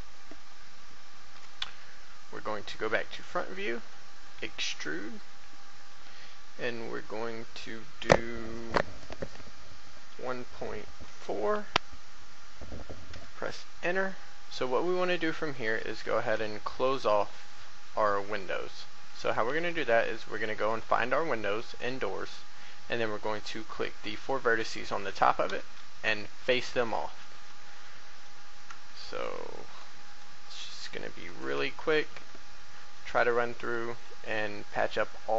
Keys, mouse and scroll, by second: 2.5 1, 3.3 shift+middle click, 4.2 shift+e, 9.9 KP_1, 10.3 KP_Decimal, 11.0 KP_4, 14.4 middle click, 15.6 7, 16.5 shift+middle click, 20.3 shift+right click, 20.7 shift+right click, 21.2 scroll up 1, 21.3 middle click, 25.5 f, 26.5 shift+a, 26.8 middle click, 27.7 shift+middle click, 28.8 shift+middle click, 29.7 right click, 30.1 shift+right click, 30.7 shift+right click, 31.1 shift+right click, 31.5 shift+f, 32.5 shift+middle click, 33.6 right click, 33.9 shift+right click.